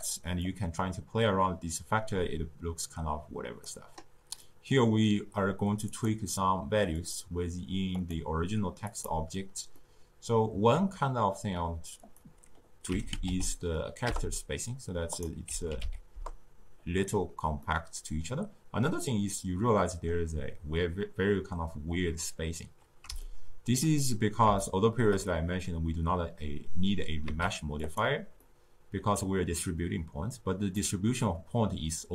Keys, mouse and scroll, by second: 0.4-3.4 drag, 4.4-5.9 middle drag, 5.9 click, 6.9 click, 8.0 click, 8.9 click, 9.8-12.0 middle drag, 12.0-15.0 drag, 15.1-17.6 drag, 17.6-20.6 middle drag, 23.2-27.2 shift+middle drag, 27.2 z, 28.4-32.1 middle drag.